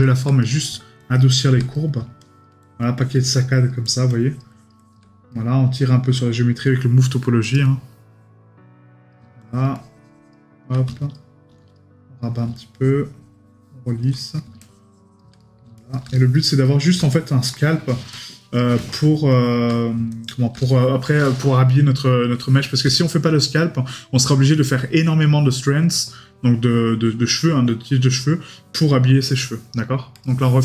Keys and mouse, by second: 0.4 right click, 1.7 right click, 5.3 right click, 14.2 right click, 19.7 right click, 22.6 right click.